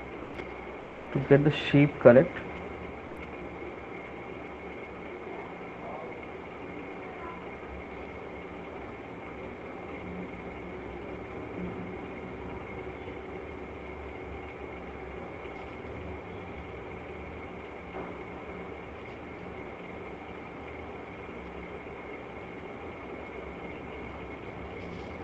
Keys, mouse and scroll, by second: 0.3 alt+click, 0.8 alt+click, 2.4 alt+click, 6.1 alt+click, 8.1 alt+click, 12.5 alt+click, 12.8 alt+click, 13.2 alt+click, 15.3 alt+click, 15.5 alt+click, 15.9 alt+click, 17.7 click, 18.1 click, 19.1 click, 19.4 click, 20.4 click, 20.8 click, 21.4 click, 21.8 click, 22.0 click, 22.2 click, 24.0-24.3 shift+click, 24.7 f.